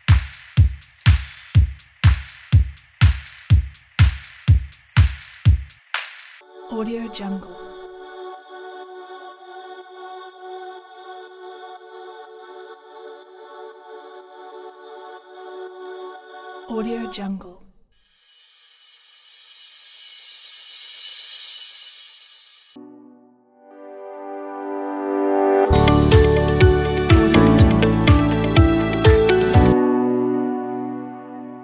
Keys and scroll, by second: 6.3 s, 16.9 s, 22.7 s, 25.3 s, 29.5 s.